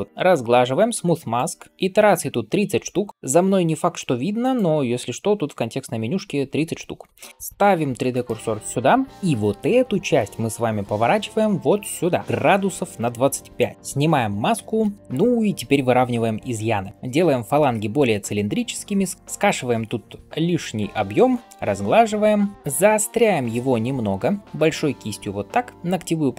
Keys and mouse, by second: 4.5-7.3 middle drag, 7.3-9.1 shift+drag, 8.0 shift+right click, 9.1-11.2 middle drag, 11.2-26.3 drag, 14.4 alt+m, 22.5 ], 23.2 [, 23.3 [, 23.4 [, 24.4 ], 25.6 [, 25.7 [.